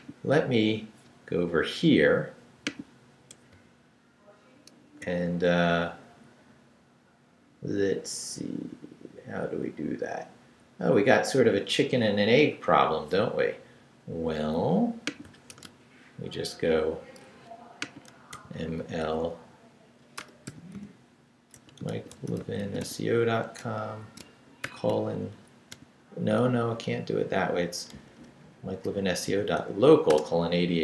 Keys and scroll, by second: 15.5 super+t, 18.3-23.3 typing, 23.8 Right, 24.6 shift+;, 25.7 shift+8, 26.7 BackSpace, 29.3 i, 29.6 o, 30.1 Return.